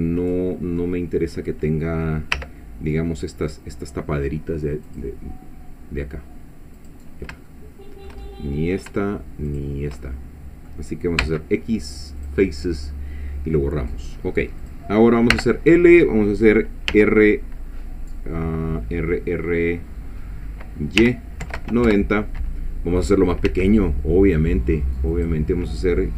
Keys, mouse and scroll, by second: 0.8 middle click, 2.3 3, 3.5 click, 4.9 click, 6.8 click, 7.5-8.9 shift+middle drag, 9.5 shift+click, 10.0 shift+middle click, 11.2 x, 12.2 click, 14.6 click, 15.3 l, 16.9 r, 21.0 y, 21.4 KP_9, 21.6 KP_0, 21.9 Return, 23.5 s, 25.1 click.